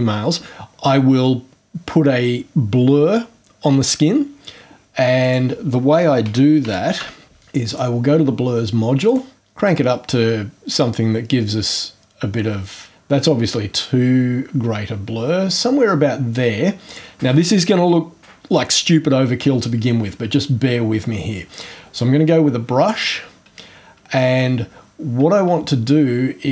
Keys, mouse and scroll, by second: 5.2 click, 6.0-7.5 typing, 7.7 click, 9.1 click, 16.8 click, 20.4 scroll down 1, 21.5 click, 23.8-24.4 scroll up 2.